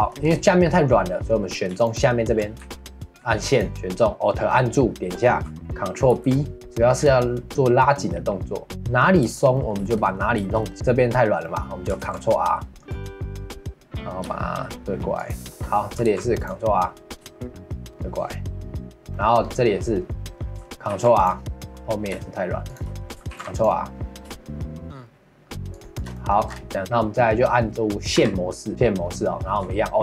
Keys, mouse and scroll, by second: 0.0 shift+middle click, 0.2-1.8 scroll up 1, 1.8 alt+click, 2.6 2, 3.5-6.1 alt+drag, 6.1 ctrl+b, 8.7-10.7 middle drag, 10.7-11.4 scroll up 2, 11.4 middle click, 12.0 ctrl+r, 15.5 shift+middle click, 16.0 ctrl+r, 19.0 shift+middle click, 19.4-20.8 scroll up 2, 20.8 scroll up 1, 20.9 ctrl+r, 23.3 ctrl+r, 25.9 shift+middle click, 26.5 scroll down 1, 26.7 middle click, 26.8-28.1 scroll up 2, 28.1 2.